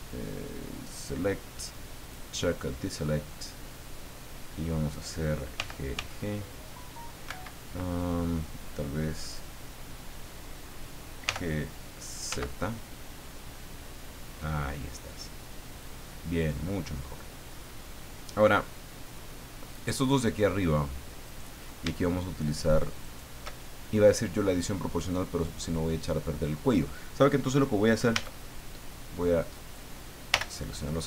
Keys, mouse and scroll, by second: 0.9 click, 1.3 middle click, 2.0 click, 4.4 middle click, 5.5 g, 7.3 Escape, 11.2 g, 12.3 z, 15.7 click, 16.0-18.4 middle drag, 19.7 click, 21.2 right click, 23.0 shift+right click, 28.1 a, 29.5 right click, 30.3 l.